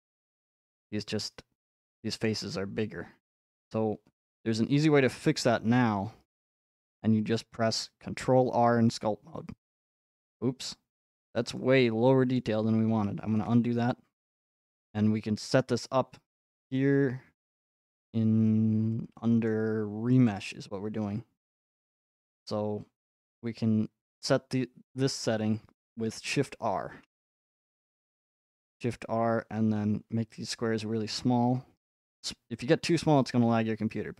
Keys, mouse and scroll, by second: 0.4-3.8 middle drag, 3.8-4.3 scroll, 4.8 scroll, 7.1 scroll, 8.8 scroll, 11.4 scroll, 12.4 middle click, 12.6 middle click, 12.7 middle click, 15.6 middle click, 16.6 click, 19.5 middle click, 20.3 click, 21.4 middle click, 27.1 r.